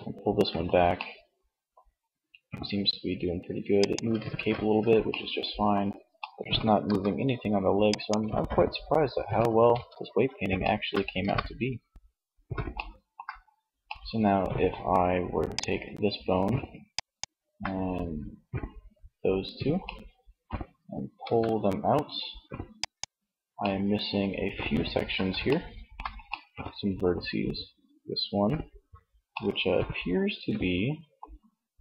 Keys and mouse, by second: 1.1 r, 3.4 ctrl+z, 5.9 r, 7.0 click, 7.4 ctrl+z, 8.6 a, 8.8 a, 10.3 alt+r, 20.5 g, 21.9 click.